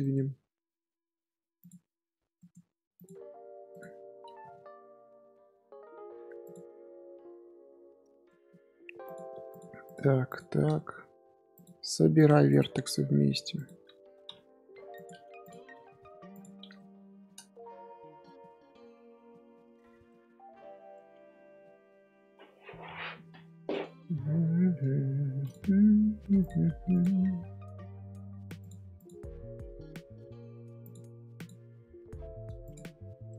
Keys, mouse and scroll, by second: 1.6 click, 2.9 click, 3.7 click, 4.3 g, 6.6 scroll down 1, 7.1 scroll up 1, 8.2-8.6 shift+middle drag, 8.6 scroll up 1, 9.0 click, 9.8 click, 10.4 scroll down 1, 10.7 shift+middle drag, 10.9 scroll up 3, 11.5 click, 12.4 click, 15.4 click, 16.5 scroll down 2, 16.7 shift+middle click, 17.5 scroll up 1, 17.7 scroll down 1, 18.2 shift+middle click, 18.5 scroll up 2, 19.2-20.3 shift+middle drag, 20.3 scroll up 2, 20.9-24.6 shift+middle drag, 24.8 Tab, 25.1 Tab, 25.4 click, 26.9 click, 28.9 click, 31.3 click, 33.2-33.3 middle drag.